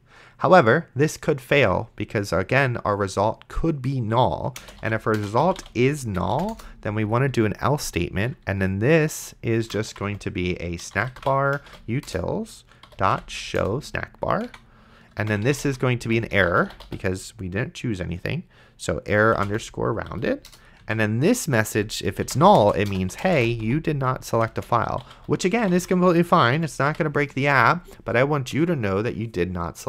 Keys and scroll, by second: 4.6-6.3 typing, 6.5 Return, 9.5-13.6 typing, 14.5 Tab, 15.2-17.4 typing, 19.5 r, 20.1 Down, 20.5 Return, 20.8 Tab, 21.8-26.9 typing, 26.6 End, 27.8 ctrl+s.